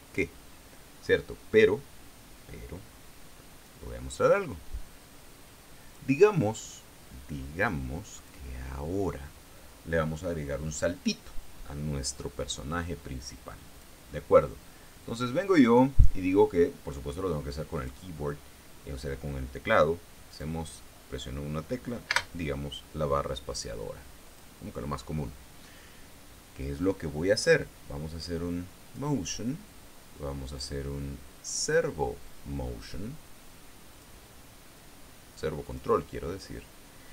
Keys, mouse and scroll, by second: 4.7-6.7 drag, 8.7 click, 14.3 click, 18.3 click, 20.9 click, 22.7 space, 24.8 click, 29.4 click, 31.1-32.5 drag, 34.5 click, 36.2 click.